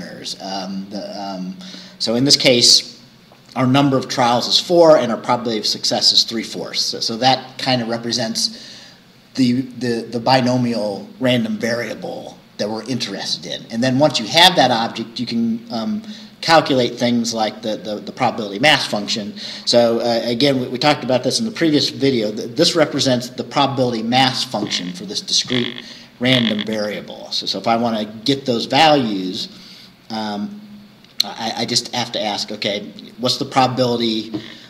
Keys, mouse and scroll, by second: 0.1 scroll down 2, 15.8-16.2 scroll down 2.